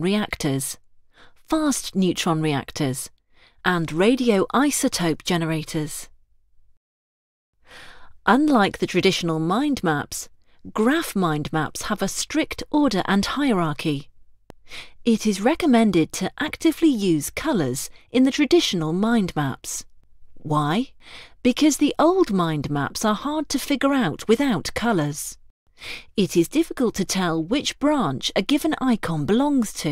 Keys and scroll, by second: 1.7 ctrl+Return.